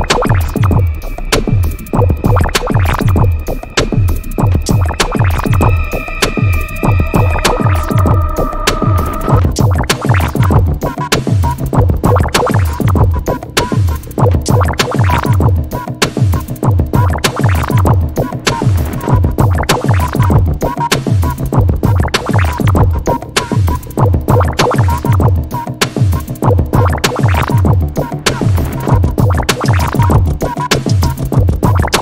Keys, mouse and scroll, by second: 0.8-4.1 drag, 4.7-7.1 drag, 8.4 scroll down 1, 9.2-14.3 drag, 15.1 0, 15.6 p, 16.0 click, 18.6 click, 18.8-19.1 scroll down 1, 19.1-19.6 scroll up 1, 19.6-21.6 drag, 23.5-24.0 scroll down 1, 24.0-26.8 drag, 27.4 click, 28.4 scroll down 1, 28.6-30.6 drag, 31.2-32.0 drag.